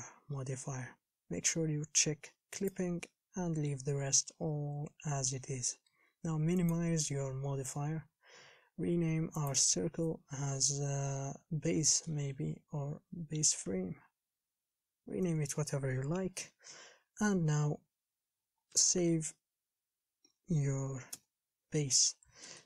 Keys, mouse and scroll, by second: 0.0-7.8 drag, 7.8 scroll up 2, 9.8-15.5 drag, 18.6 Home, 21.4 ctrl+shift+s.